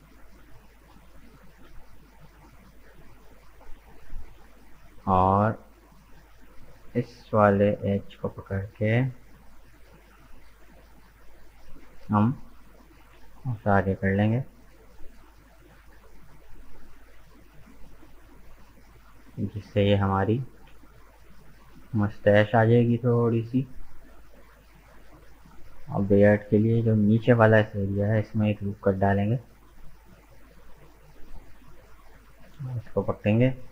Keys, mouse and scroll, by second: 0.2-1.4 middle drag, 1.4 right click, 4.6-6.8 drag, 6.8 right click, 7.6 shift+right click, 8.5-9.5 scroll up 1, 9.5 shift+right click, 9.9 shift+right click, 10.3 shift+right click, 10.8 middle click, 11.2 scroll down 3, 11.5-12.9 middle drag, 12.9 g, 18.6-20.2 middle drag, 20.2 g, 22.8-24.1 middle drag, 24.1 right click, 24.5-27.1 middle drag, 27.1 ctrl+r, 29.7 right click, 30.0-31.5 middle drag, 31.5 click, 32.3 right click, 32.9 shift+right click, 33.3 shift+right click.